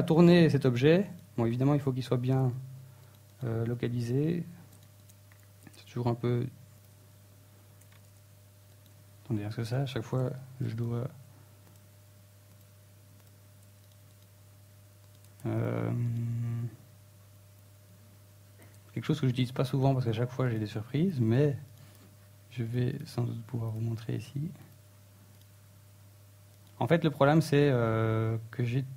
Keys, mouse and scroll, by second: 0.2 KP_1, 0.6 right click, 0.8 right click, 1.2 middle click, 2.1 right click, 2.3 right click, 2.6 scroll down 3, 2.8 g, 3.9 click, 4.2 KP_1, 5.0-5.3 scroll up 2, 5.3 r, 5.9 right click, 7.8 right click, 8.7 click, 10.9 right click, 11.2 right click, 11.5 r, 12.1 right click, 12.3 x, 12.9 right click, 14.2 shift+middle click, 15.6 shift+a, 16.7 scroll up 1, 17.3 right click, 18.6 right click, 19.5 right click, 19.8 right click, 20.6 click, 22.2 right click, 22.6 r, 23.5 right click, 24.3 right click, 26.1 n, 26.5-28.0 scroll up 16.